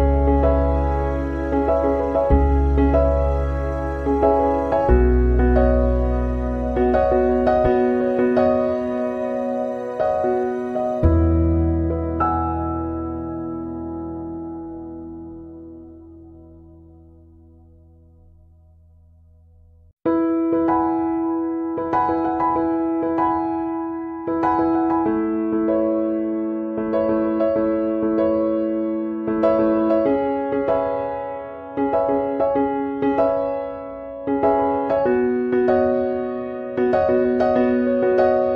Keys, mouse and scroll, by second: 1.0 click, 2.7 s, 4.9 click, 5.7-6.1 scroll up 2, 6.1 middle click, 6.5-7.0 scroll down 2, 7.0 click, 7.0-7.9 scroll down 2, 7.9 Delete, 8.3 click, 8.6 Delete, 9.0-9.8 scroll up 2, 9.8 shift+middle click, 10.3 middle click, 11.9 click, 12.6 click, 13.1 click, 14.2-14.6 scroll up 2, 14.8 shift+middle click, 15.8 click, 16.3 click, 16.7 click, 17.1 click, 18.8 click, 20.9 x, 23.0 click, 25.2 click, 25.7 x, 28.0 click, 28.9 scroll up 1, 29.2 middle click, 32.7 click, 34.8 click, 37.3 click, 37.9 click.